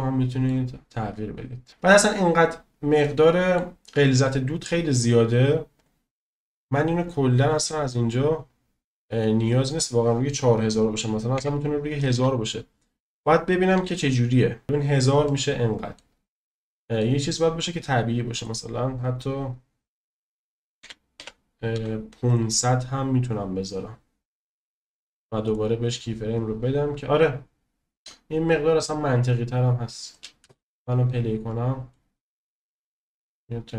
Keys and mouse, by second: 3.0-3.3 middle drag, 3.3 click, 5.7 click, 9.8-14.3 drag, 12.1 0, 15.2 middle click, 16.5 click, 18.3 middle click, 18.4 click, 28.1 drag, 28.5 click, 28.9-30.1 drag, 30.4 space, 31.5 click.